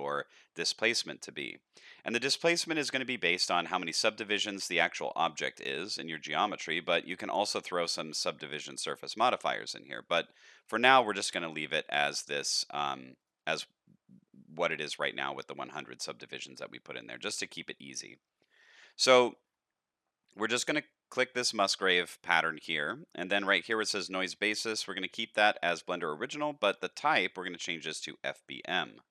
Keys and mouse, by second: 3.5 middle click, 4.3 middle click, 5.6 middle click, 8.7 drag, 26.6-28.4 drag.